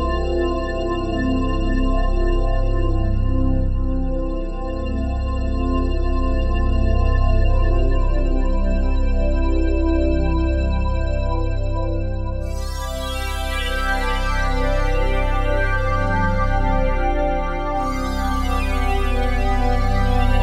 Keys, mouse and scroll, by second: 1.2-3.9 drag, 3.9-5.0 typing, 4.1 Return, 4.5 click, 5.9-6.8 drag, 6.5-7.3 typing, 7.4 click, 10.4 click, 13.1 click, 15.8 Escape, 16.7 g, 17.1 x, 20.2 click.